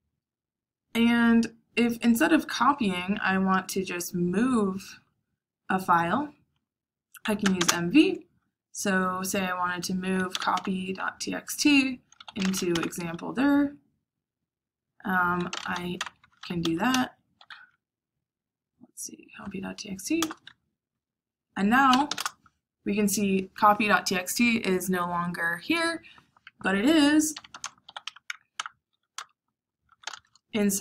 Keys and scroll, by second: 7.1-8.0 typing, 10.0-13.0 typing, 15.2-17.4 typing, 20.1 Return, 21.6-22.5 typing, 27.0-28.4 typing, 28.5 Tab, 29.1 Return, 29.5-30.3 typing.